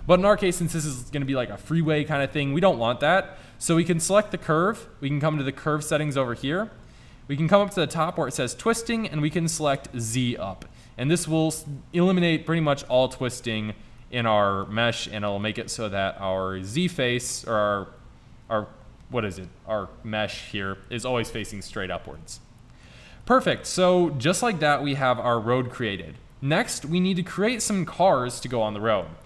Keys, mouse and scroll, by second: 0.4-1.4 drag, 1.4-4.1 middle drag, 5.6 middle click, 6.0-9.8 drag, 10.3-10.6 middle drag, 10.6 click, 10.7 middle click, 10.9-11.3 middle drag, 11.3-11.9 drag, 11.9-12.3 middle drag, 12.5-26.2 middle drag, 26.2 click, 26.6 middle click, 27.5-29.2 drag.